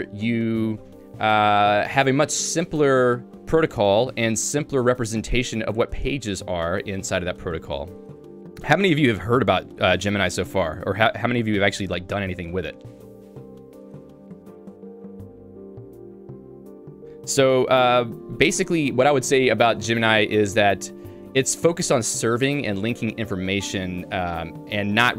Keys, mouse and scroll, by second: 4.1 click, 5.7 click, 6.9 Home, 13.2 Tab, 15.0 j.